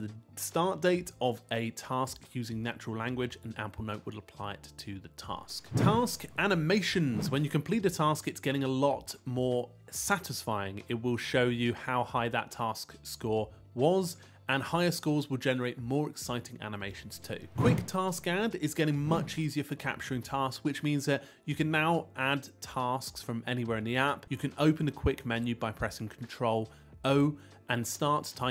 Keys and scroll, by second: 19.2 super+o, 26.9 Return.